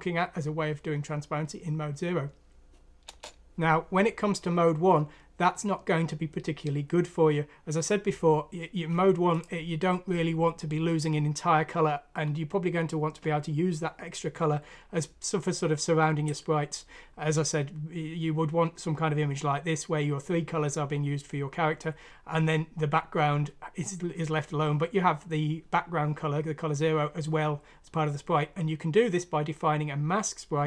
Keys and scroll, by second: 2.9 F9, 3.0 Return.